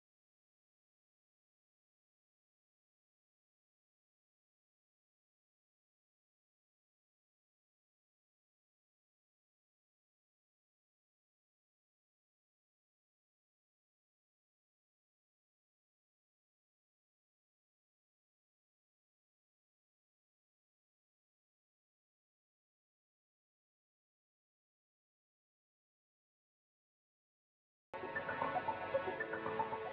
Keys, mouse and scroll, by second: 0.3 click, 1.7 scroll down 1, 2.3 click, 3.8 scroll up 1, 4.4 click, 5.9 right click, 6.1 click, 7.2 scroll down 1, 7.7 click, 9.1 scroll up 1, 9.6 click, 9.8 scroll down 1, 10.3-11.0 typing, 10.4 scroll up 1, 11.6 ctrl+z, 15.5 scroll down 1, 16.6 ctrl+z, 17.9 click, 19.3 ctrl+z, 21.1 ctrl+z, 22.3 click, 23.5 ctrl+z, 24.8 click, 26.3 ctrl+z, 28.1 click.